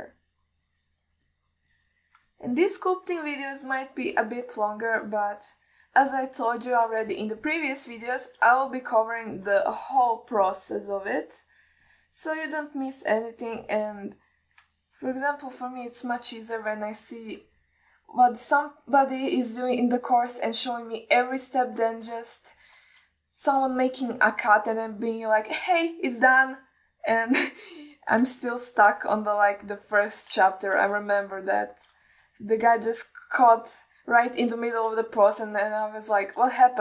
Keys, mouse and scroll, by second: 1.4 middle click, 1.9 click, 2.6 alt+middle click, 3.0 click, 3.6 alt+middle click, 4.4 click, 5.5 alt+middle click, 6.3 click, 6.8 middle click, 7.4 click, 8.3 ctrl+alt+middle click, 8.7 middle click, 9.3 alt+shift+middle click, 10.0 ctrl+alt+middle click, 10.6 alt+shift+middle click, 10.9 ctrl+alt+middle click, 11.3 middle click, 11.7 click, 12.4 middle click, 13.1 middle click, 14.0 click, 15.1 click, 16.1 ctrl+middle click, 16.5 alt+middle click, 17.3 alt+shift+middle click, 17.8 ctrl+middle click, 18.4 middle click, 22.0 alt+shift+middle click, 22.7-23.1 ctrl+alt+middle drag, 23.7 alt+shift+middle drag, 24.7 click, 25.6-25.9 ctrl+alt+middle drag, 26.8-27.2 middle drag, 27.7-28.2 drag, 28.6-29.3 middle drag, 29.8 shift+click, 30.5 middle click, 31.2 ctrl+alt+middle click, 31.8-32.1 shift+middle drag, 32.3 ctrl+alt+middle click, 32.8 middle click, 33.4-33.9 shift+drag, 34.3 alt+middle click, 34.9 ctrl+alt+middle drag, 35.4 middle drag, 36.0 shift+middle drag, 36.4 ctrl+alt+middle drag.